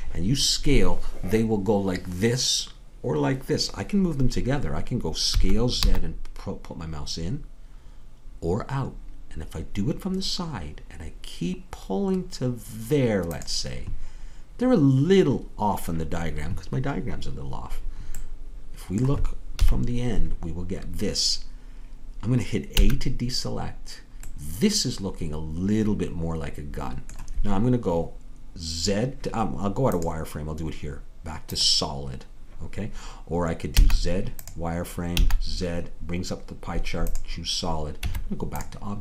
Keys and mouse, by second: 5.3 s, 19.6 KP_1, 22.8 a, 29.9-33.7 drag, 33.7 z, 35.2 z, 38.0 Tab.